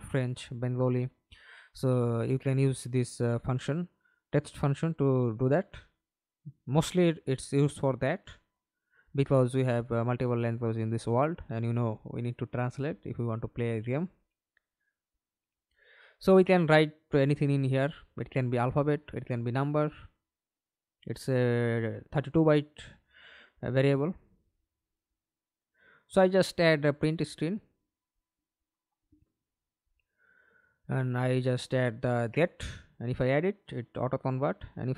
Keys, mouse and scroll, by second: 0.5 right click, 2.0-4.5 typing, 4.6 Return, 5.2-7.3 scroll up 1, 7.3-7.7 scroll up 1, 16.2-18.6 typing, 20.1-23.4 typing, 26.0-27.7 typing, 30.3 double click.